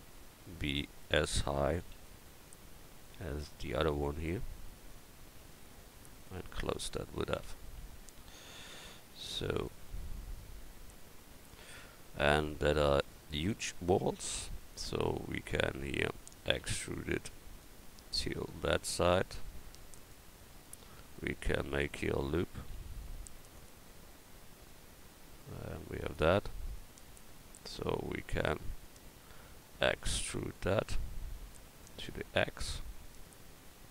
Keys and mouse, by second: 1.8 e, 2.5-4.2 drag, 5.6 shift+right click, 7.3 f, 10.8 click, 10.8 f, 11.8 right click, 16.5 e, 22.6 ctrl+r, 30.4 e.